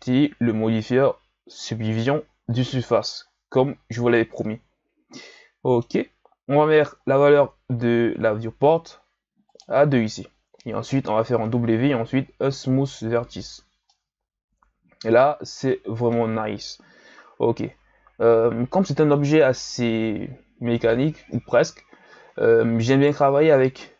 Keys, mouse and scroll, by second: 2.6 click, 4.8-5.2 scroll down 2, 5.2-6.2 middle drag, 6.2-7.0 scroll up 1, 7.0-9.5 ctrl+scroll up 2, 9.5-11.4 drag, 11.4 w, 13.4 a, 13.9-17.0 middle drag, 22.9 right click.